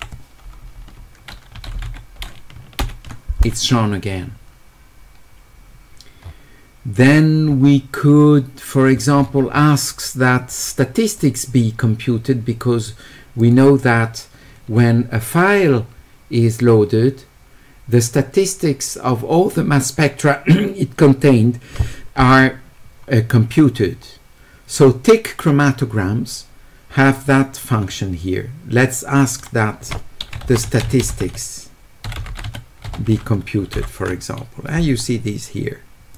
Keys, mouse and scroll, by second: 1.6 s, 6.2 middle click, 7.0 middle click, 7.5-8.6 middle drag, 9.0 middle click, 9.2 middle click, 11.2 click, 13.4 click, 29.2 click, 29.4 click, 30.4-32.4 typing.